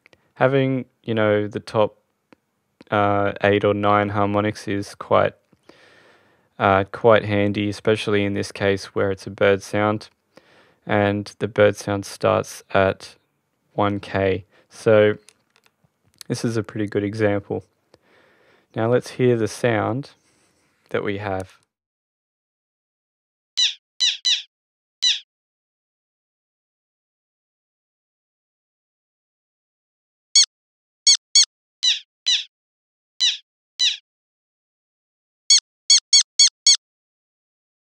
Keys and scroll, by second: 35.1 space.